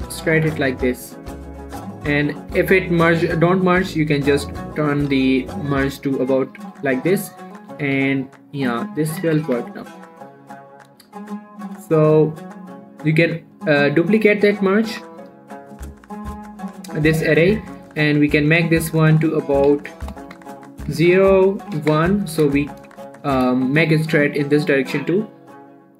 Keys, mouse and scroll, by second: 0.0 y, 0.9 click, 3.2 shift+middle click, 3.4-4.0 shift+scroll up 2, 5.2 click, 6.0-6.8 scroll down 1, 6.9 shift+middle click, 7.6 click, 8.0 g, 8.2 y, 9.4 click, 9.6 z, 9.8 Tab, 10.0 scroll down 1, 11.5 shift+middle click, 13.4 click, 15.3 ctrl+z, 16.2 click, 17.5-19.7 scroll down 1, 19.7 click, 22.6-23.5 scroll up 1, 23.7 Tab, 23.9 shift+middle click, 24.1 scroll up 1.